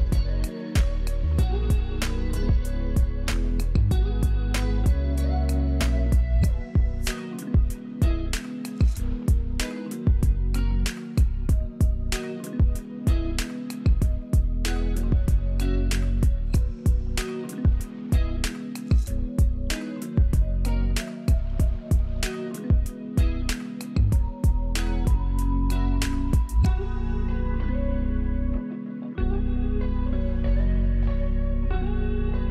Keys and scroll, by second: 4.2 F11, 5.4 space, 9.9 F11, 14.4 F11, 17.7 F11, 22.2 F11, 26.9 space, 27.4 space, 28.2 space.